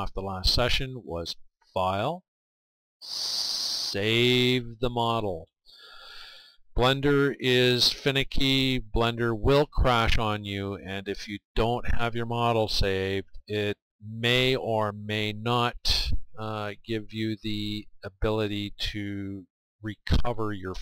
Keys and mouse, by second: 1.6-20.8 drag.